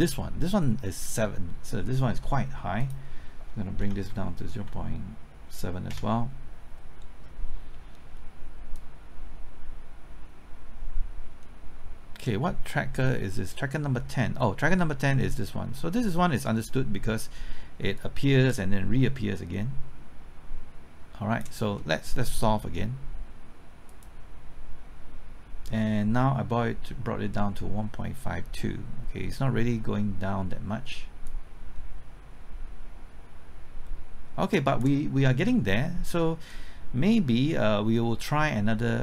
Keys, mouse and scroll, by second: 3.8 KP_0, 3.9 KP_Decimal, 4.6 KP_7, 5.9 KP_Enter, 8.7-16.7 drag, 14.8 Return, 18.0-21.7 drag, 31.3-35.7 drag, 33.9 KP_Enter, 38.3-39.0 scroll down 1.